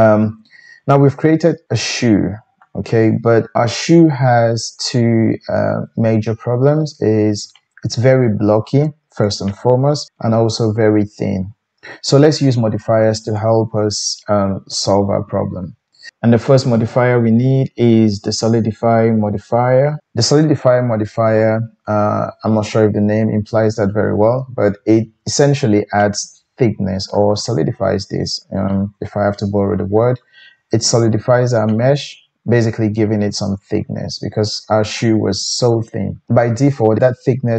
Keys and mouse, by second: 13.1-37.5 drag.